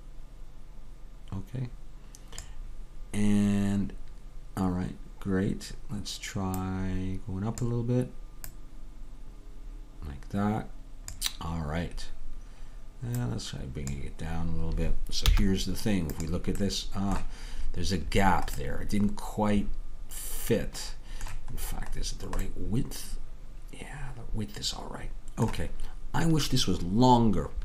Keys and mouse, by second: 6.6-11.1 drag, 13.2-15.3 drag, 15.3 z, 16.7-25.3 middle drag.